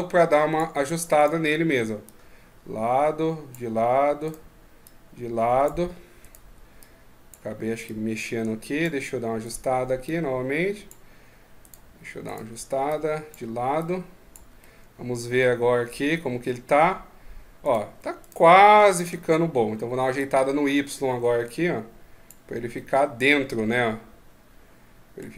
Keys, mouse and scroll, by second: 0.9 right click, 1.8 click, 4.0 right click, 4.6 click, 6.0 right click, 6.6 click, 7.6 click, 9.2 right click, 9.8 click, 11.4 right click, 12.0 right click, 12.6 click, 14.4 middle click, 17.4 right click, 18.0 shift+right click, 19.9 click, 22.5 middle click.